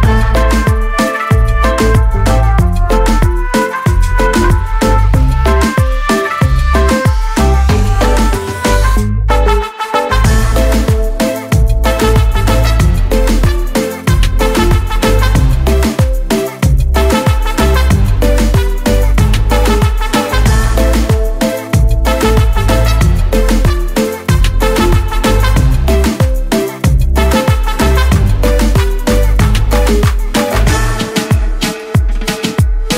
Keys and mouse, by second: 0.6 click, 3.0 click, 6.4 click, 8.1 click, 9.9 click, 12.1 click, 16.6 click, 22.9 click, 24.2 click, 26.0 click, 30.1 right click, 31.1 click.